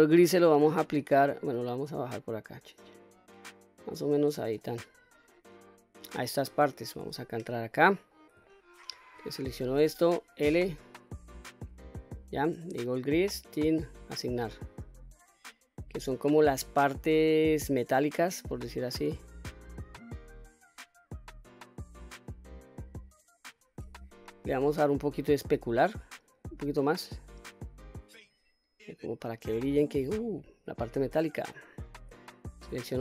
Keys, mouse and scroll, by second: 1.4 click, 5.7 click, 7.1 Tab, 7.7-8.4 scroll up 2, 8.6 shift+middle click, 9.4 click, 10.5 l, 13.5 click, 14.2 click, 14.8 click, 15.6 middle click, 17.1 click, 24.4-27.6 scroll down 3, 27.6 click, 29.0-29.3 scroll down 1, 29.3 click, 29.9 middle click, 30.9 scroll down 1, 31.2 middle click, 32.4 click.